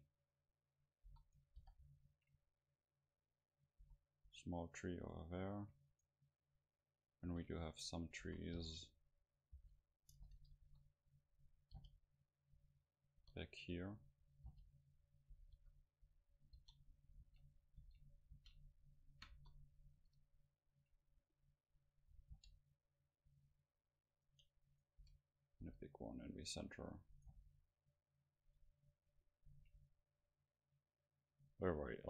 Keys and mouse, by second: 1.1 s, 3.8-7.0 drag, 3.8 s, 5.9-7.2 right drag, 7.3 shift+d, 7.9-12.0 drag, 8.2 s, 9.6 g, 10.6 KP_7, 11.8 g, 13.2-15.0 drag, 13.2 KP_0, 14.5 g, 15.4-17.1 drag, 15.6 KP_7, 16.6-19.3 typing, 17.2-20.8 drag, 20.2 middle click, 22.4 g, 23.2-25.0 drag, 24.3-26.7 right drag, 25.0 s, 25.6 g, 26.8-28.3 drag, 27.2-28.3 right drag, 27.3 g, 28.9-30.3 middle drag.